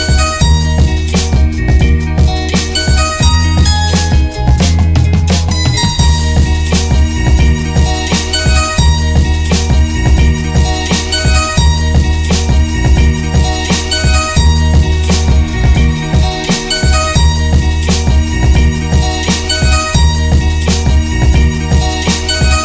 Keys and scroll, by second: 1.3 Return, 5.0 ctrl+g, 5.4 n, 5.9 Return, 7.2 |, 8.5 ctrl+c, 12.9 ., 13.1 ., 16.2 Return, 18.6 n, 19.0 Return.